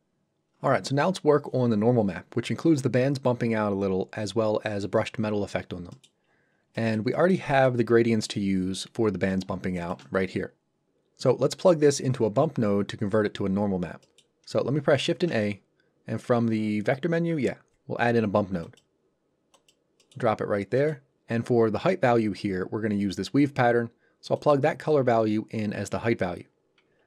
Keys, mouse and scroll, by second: 5.9 middle click, 6.2 scroll down 1, 6.8 middle click, 7.9 scroll up 1, 8.2 middle click, 8.5-9.0 scroll up 1, 9.8 ctrl+shift+click, 14.0 middle click, 15.0 shift+a, 18.6 click, 20.0 middle click, 20.3-20.8 scroll up 1, 20.8 middle click, 24.4 click, 27.0 scroll down 1.